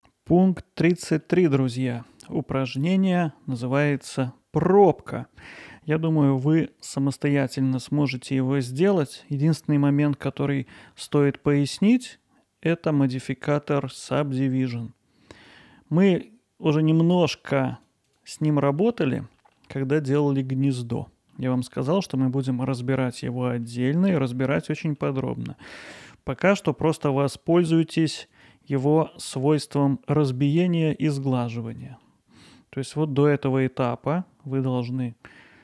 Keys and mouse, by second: 1.3-1.9 middle drag, 2.3-4.0 ctrl+alt+middle drag, 6.1 click, 6.7-7.3 middle drag, 7.8-9.5 alt+middle drag, 9.8 middle drag, 10.3 alt+middle click, 11.5 click, 15.4 click, 16.0 click, 17.1 click, 17.8 click, 18.1 click, 18.8 middle drag, 19.4 middle drag, 20.2-20.7 middle drag, 21.3-21.8 middle drag, 22.5-23.2 ctrl+alt+middle drag, 23.6-24.3 middle drag, 24.7-25.0 alt+middle drag, 25.3-25.9 ctrl+alt+middle drag, 26.1-26.5 middle drag, 28.3 click, 32.1-32.5 alt+middle drag, 35.4 alt+middle click.